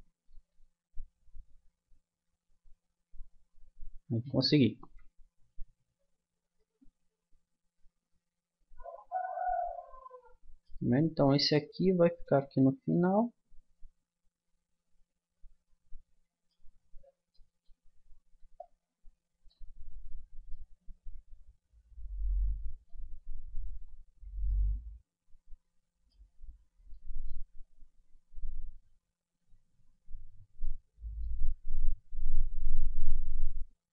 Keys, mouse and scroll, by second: 0.5 g, 4.4-8.3 middle drag, 10.9-14.7 middle drag, 17.3-19.5 middle drag, 19.8-22.3 middle drag, 23.1-24.5 middle drag, 26.3 middle click, 27.9 Tab, 28.5 Tab, 29.0 a, 30.3 Tab, 33.1-33.9 drag.